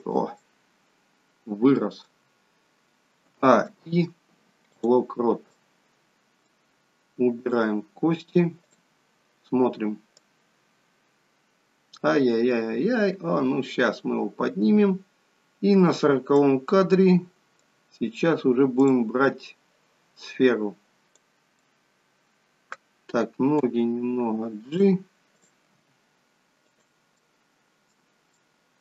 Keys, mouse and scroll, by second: 0.5 middle click, 3.2 a, 3.6 i, 5.5 middle click, 7.4 click, 8.7 click, 10.6 click, 16.9 middle click, 18.8 click, 21.8 click, 21.8 middle click, 23.8 g, 25.3 click, 25.8 g, 27.2 middle click, 28.5 middle click.